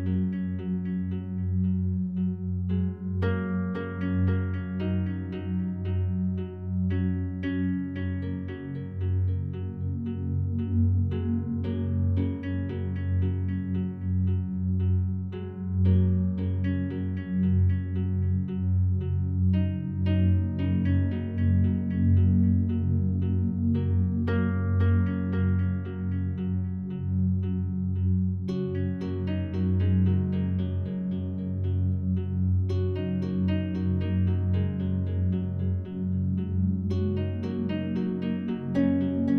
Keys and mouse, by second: 2.3 click, 3.3-5.2 alt+drag, 6.4 click, 7.5 click, 7.9 click, 8.3 click, 9.1 click, 10.1-11.0 alt+drag, 12.6 1, 13.9-15.2 alt+shift+drag, 15.2-16.2 typing, 15.9 drag, 16.9 click, 19.3 click, 20.4 click, 21.6 typing, 23.1 click, 23.8-24.1 typing, 25.1 click, 25.6 ctrl+alt+click, 26.4 alt+shift+click, 27.1 ctrl+alt+click, 27.5 typing, 29.5 typing, 31.4 click, 32.4-32.8 typing, 33.5 click, 36.0 typing, 37.0 click, 37.6 alt+click, 38.4 click.